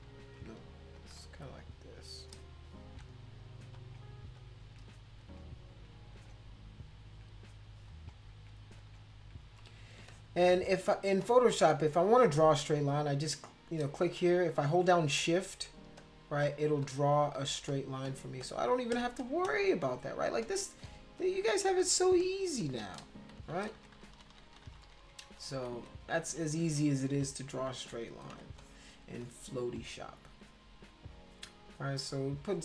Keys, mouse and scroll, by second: 0.9 click, 1.6 shift+click, 2.8 ctrl+z, 3.7 click, 4.4 shift+click, 5.2 click, 6.1 click, 6.7 shift+click, 7.9 click, 8.2 shift+click, 8.8 click, 9.0 shift+click, 10.0 space, 10.1 click, 10.6 click, 11.2 click, 12.9-14.3 drag, 15.2 shift+click, 16.0 shift+click, 16.4 shift+click, 16.8 shift+click, 17.3 shift+click, 17.7 shift+click, 18.0 shift+click, 18.4 shift+click, 18.9 shift+click, 19.5 shift+click, 19.6 shift+click, 20.4 shift+click, 20.9 shift+click, 21.2 shift+click, 21.5 shift+click, 21.8 shift+click, 22.2 shift+click, 22.6 shift+click, 23.4 ctrl+z, 23.6 ctrl+z, 23.8 ctrl+z, 23.9 ctrl+z, 24.1 ctrl+z, 24.3 ctrl+z, 24.5 ctrl+z, 24.7 ctrl+z, 24.8 ctrl+z, 25.0 ctrl+z, 25.2 ctrl+z, 25.4 ctrl+z, 25.5 ctrl+z, 25.7 ctrl+z, 26.0 ctrl+z, 26.2 ctrl+z, 26.5 ctrl+z, 26.6 ctrl+z, 27.1 ctrl+z, 27.7 ctrl+z, 28.4 space, 28.6 click, 29.2 click, 29.8 click, 30.6-32.6 drag.